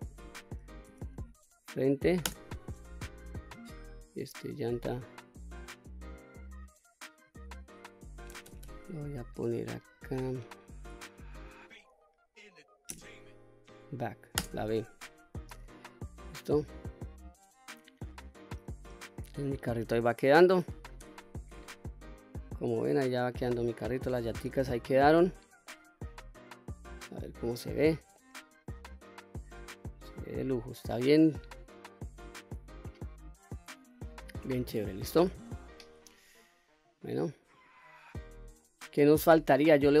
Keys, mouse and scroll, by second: 3.7 click, 5.0 click, 5.1-15.2 drag, 8.4 BackSpace, 8.6 BackSpace, 15.7-16.2 middle drag, 16.6-17.1 scroll down 2, 17.1-18.1 middle drag, 18.3-18.7 scroll down 1, 18.7-20.5 middle drag, 21.0 Tab, 21.5 scroll down 1, 21.8-24.0 middle drag, 24.2 click, 24.6-25.2 scroll up 3, 25.2 middle click, 26.7 click, 27.4 click, 28.2-32.0 middle drag, 32.4-34.5 middle drag, 34.9 middle click, 35.5 Tab, 36.9 click, 37.5 click, 38.1-38.6 middle drag, 39.1-39.5 scroll down 2, 39.5-39.9 middle drag.